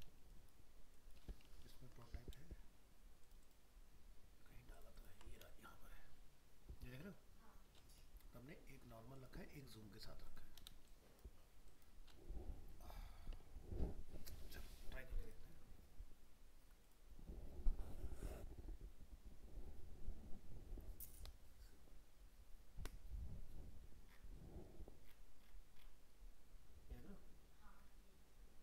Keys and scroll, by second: 2.7 ctrl+space.